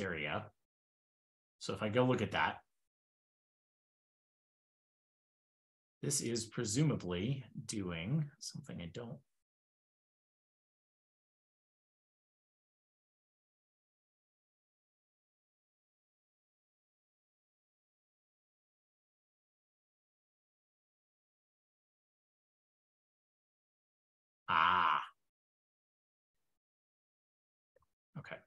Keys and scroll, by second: 1.0 super+c, 1.2 super+Tab, 2.0 super+k, 2.2 super+w, 2.4 super+p, 2.4 super+v, 9.6 super+f, 11.2 super+g, 11.3 super+g, 11.4 super+g, 14.2 ctrl+b, 14.8 super+g, 15.1 super+Tab, 25.2 super+c, 25.5 super+Tab, 26.1 super+f, 26.3 super+v, 27.0 super+g.